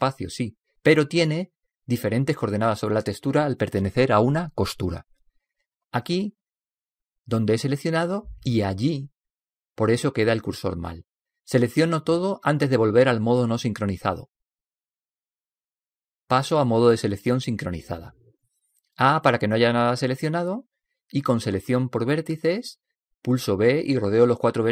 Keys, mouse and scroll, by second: 12.6 a, 13.1 a, 18.0 click, 21.2 a, 23.7 a, 24.0 a.